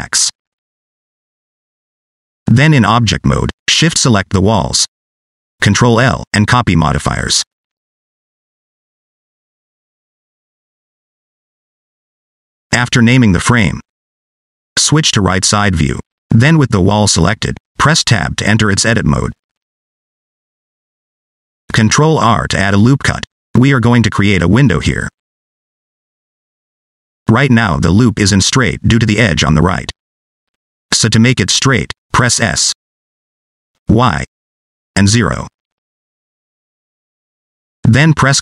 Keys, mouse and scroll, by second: 2.6 Tab, 4.4 shift+click, 6.3 ctrl+l, 10.3-10.9 scroll down 3, 10.9 click, 12.3 F2, 15.0 scroll down 1, 15.2 shift+middle click, 16.2 click, 16.8-17.1 scroll up 1, 17.1 click, 17.6 shift+middle click, 18.0 scroll up 1, 18.2 shift+middle click, 19.1 Tab, 20.8 ctrl+r, 26.7 scroll down 1, 26.8 middle click, 27.7 scroll down 1, 27.8 middle click, 30.7 s, 37.1 click, 37.6 scroll up 2, 38.0 shift+middle click.